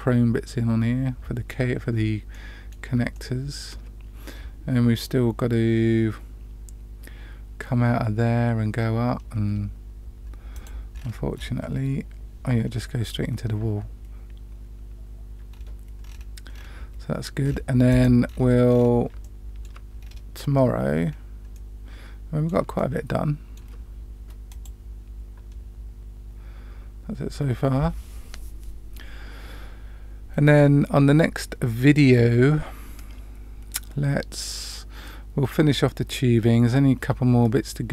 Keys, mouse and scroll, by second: 2.3 middle click, 3.1-3.7 shift+middle drag, 17.8 click, 18.2-18.7 scroll down 2, 18.3-18.7 scroll up 1, 18.7-19.1 scroll down 2, 19.2-19.6 shift+middle drag, 19.9-21.0 scroll up 2, 21.0 scroll down 1, 21.5-22.5 middle drag, 22.7-23.5 shift+middle drag, 24.7 click.